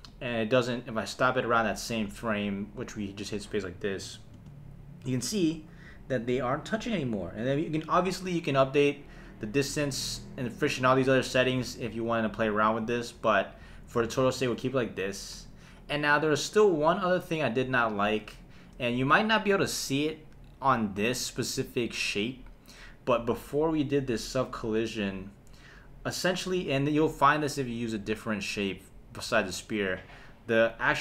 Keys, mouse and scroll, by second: 0.1 space, 2.8 space, 4.0 space, 4.4 space, 16.8 space, 18.0 space, 18.5 shift+Left, 19.2 space, 23.3 space, 30.3 click.